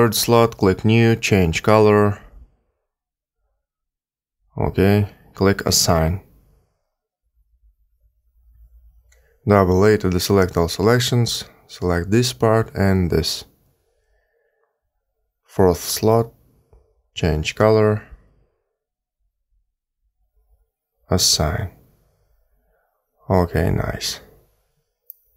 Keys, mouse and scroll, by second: 0.2 click, 1.1 click, 2.1 click, 7.2 click, 9.9 a, 10.0 a, 11.5 l, 13.2 l, 15.7 click, 16.5 click, 17.8 click, 22.1 click, 24.3 a, 24.4 a.